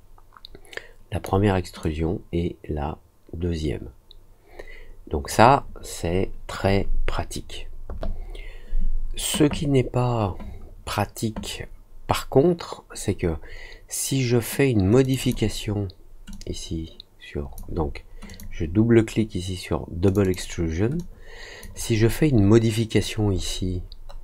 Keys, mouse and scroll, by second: 1.7-5.2 drag, 15.0 click, 15.1 click, 16.2-17.5 drag, 18.2 click, 20.0 click, 20.2 click, 20.9 click, 22.0 scroll down 1, 22.9-23.5 scroll up 2, 23.8 scroll down 1.